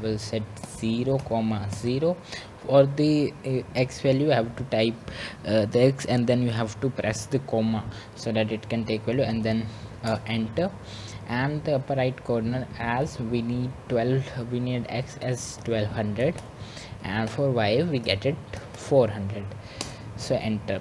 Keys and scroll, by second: 1.1 Return, 10.3-11.0 typing, 15.7 Return, 20.3 typing.